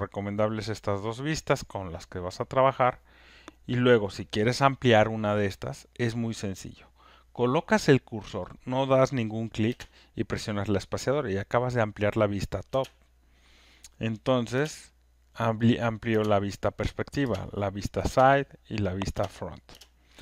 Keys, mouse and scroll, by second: 0.3 click, 0.7 click, 1.1 click, 12.6 space, 14.5 space, 16.0 space, 17.2 space, 18.0 space, 19.1 space, 19.7 space.